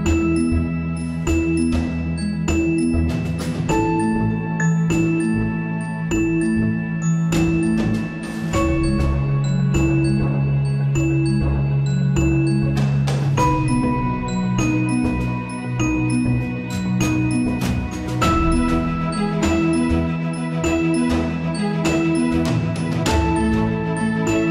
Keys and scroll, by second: 3.7 ctrl+z, 9.4 alt+/, 10.0 ctrl+s, 16.7 ctrl+s, 16.9 alt+/, 17.5 ctrl+s, 19.5 Return, 20.0 alt+/, 20.1 ctrl+s, 21.0 Return, 22.4 ctrl+s.